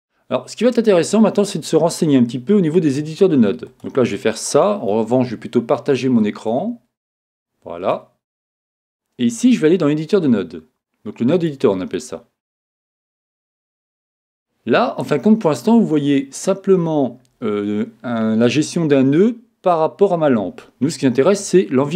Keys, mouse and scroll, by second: 6.5 click, 7.1 click, 7.5 click.